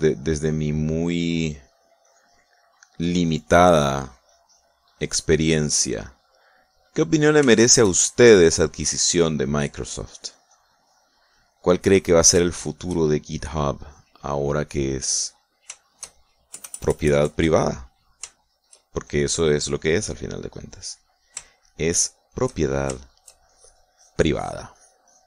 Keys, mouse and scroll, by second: 0.2 click, 1.0-4.1 drag, 4.2-5.8 drag, 6.1-8.0 drag, 8.4 shift+click, 9.4-10.5 shift+drag, 11.0-12.6 drag, 12.9-13.9 middle drag, 14.0 shift+middle click, 14.2-16.2 shift+drag, 16.2 middle click, 16.8 shift+middle click, 17.4 KP_Add, 18.8 middle click, 19.3 shift+middle click, 20.0-21.2 shift+drag, 21.3 click, 21.8 middle click, 22.4 shift+middle click, 23.0 shift+middle click, 23.5 shift+middle click, 24.4 shift+click.